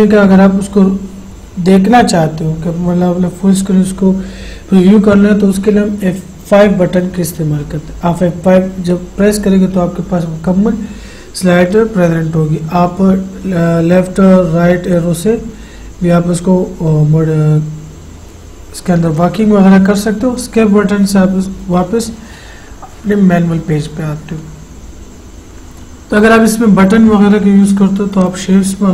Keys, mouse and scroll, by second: 6.8 F5, 13.2 Right, 28.4 click.